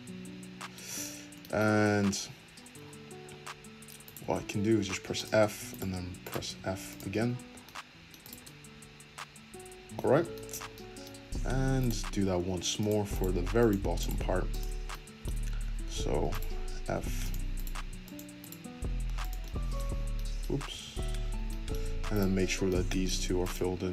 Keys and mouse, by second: 4.1-5.7 middle drag, 4.7 f, 5.7 click, 6.4-8.2 middle drag, 6.4 f, 7.1 Tab, 8.2-9.4 drag, 9.4-11.8 middle drag, 11.3 Tab, 11.8 click, 11.8-13.1 middle drag, 12.4 f, 13.1 click, 13.2 middle click, 13.3 f, 14.0 click, 14.2 f, 16.3 click, 16.9 f, 17.5 click, 17.8 f, 18.4 click, 18.8-22.1 middle drag, 18.8 f, 20.6 ctrl+z, 21.2 ctrl+z, 22.1 click, 22.6-23.9 middle drag, 23.1 f.